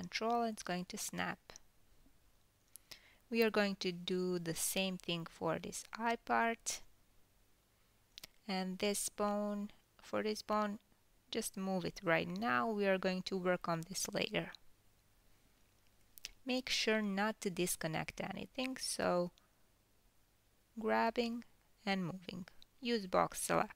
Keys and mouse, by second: 0.4 g, 2.1 click, 2.7 g, 5.5 click, 6.2 l, 7.2 g, 9.4 click, 12.4 l, 12.5 middle click, 13.3 g, 14.1-15.5 middle drag, 15.5 click, 15.5-19.8 middle drag, 16.8 ctrl+g, 19.8 click, 19.9-22.4 middle drag, 20.7 g, 22.4 drag, 22.5-23.7 middle drag, 23.2 g.